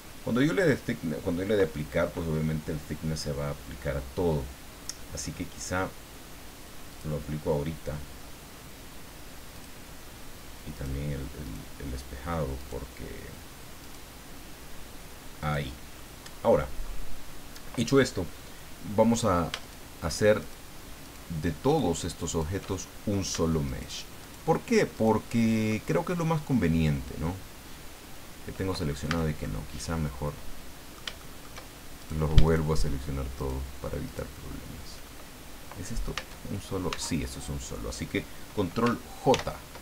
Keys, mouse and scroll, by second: 6.9 click, 9.5 click, 10.7 right click, 11.0 middle click, 11.4 right click, 12.6 right click, 13.8 right click, 15.4 click, 15.9 middle click, 16.9 scroll up 2, 19.1 right click, 19.6 shift+right click, 20.4 shift+right click, 21.0 shift+right click, 21.7 shift+right click, 22.3 shift+right click, 22.7 shift+middle click, 23.6 shift+right click, 24.2 shift+right click, 24.9 shift+right click, 25.8-29.0 shift+middle drag, 29.0 a, 29.4-31.1 middle drag, 31.2 shift+middle click, 32.0 shift+right click, 32.5 shift+right click, 33.4 shift+right click, 34.0 shift+right click, 36.2 Tab, 36.9 Tab, 39.3 ctrl+j.